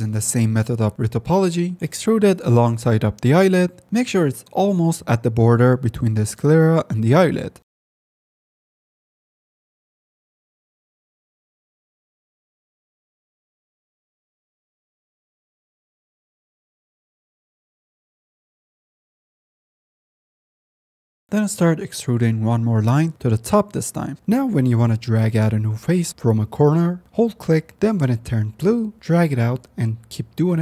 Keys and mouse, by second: 1.6 click, 3.2 click, 3.5 click, 4.2 click, 4.3 click, 4.6 click, 5.4 click, 6.2 middle click, 6.6 middle click, 7.3 shift+middle click, 7.6 middle click, 7.6 click, 7.7 middle click, 7.8 click, 8.1 click, 8.4 shift+middle click, 8.6 click, 9.1 click, 9.4 click, 9.6 click, 9.9 click, 10.0 shift+middle click, 10.4 click, 10.7 click, 11.3 click, 11.6 click, 11.8 click, 12.1 click, 13.0 click, 13.8 ctrl+r, 14.2 ctrl+z, 14.3 ctrl+r, 14.5 ctrl+z, 14.6 ctrl+r, 15.0 click, 15.1 click, 15.6 click, 16.2 middle click, 16.2 click, 16.4 click, 16.5 middle click, 16.9 click, 17.0 click, 17.4 shift+middle click, 17.6 middle click, 18.2 middle click, 18.7 middle click, 18.9 shift+middle click, 19.4 middle click, 19.8 middle click, 20.1 middle click, 20.4 middle click, 20.6 click, 20.8 ctrl+s, 20.9 click, 21.7-23.5 drag, 28.0-29.8 ctrl+drag, 30.2-30.6 drag.